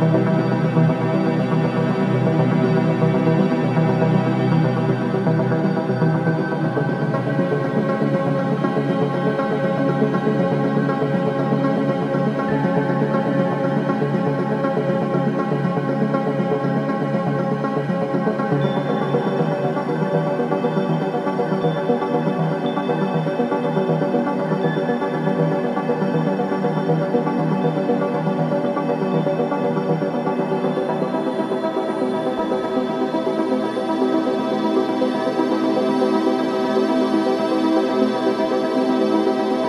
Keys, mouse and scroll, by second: 1.7-4.0 right drag, 4.0 click, 4.4 alt+middle click, 7.1 click, 11.7-12.1 scroll down 1, 15.9-19.4 shift+drag, 19.4 ctrl+z, 20.4-23.8 shift+drag, 23.8-25.9 ctrl+drag, 25.9 alt+middle click, 26.6 scroll down 1, 28.0-28.4 scroll up 1, 28.4 scroll, 28.5-28.9 scroll down 1, 29.1 shift+click, 30.4 scroll up 1, 32.0-34.8 shift+drag, 34.8-37.1 right drag, 37.1 click, 37.4 scroll down 1, 38.9 click.